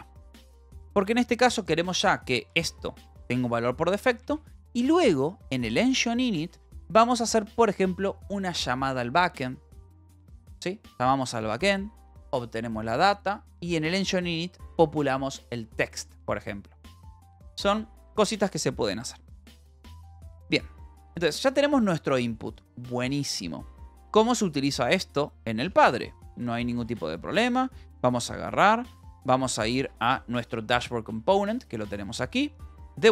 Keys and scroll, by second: 1.0 Escape, 1.6 k, 2.2 k, 3.0 shift+v, 4.0 Escape, 4.2 j, 4.8 j, 18.0 Escape, 18.9 ctrl+s, 19.6-22.1 typing, 25.5-27.4 typing, 28.8 Up, 30.2 Return, 31.0-33.1 typing.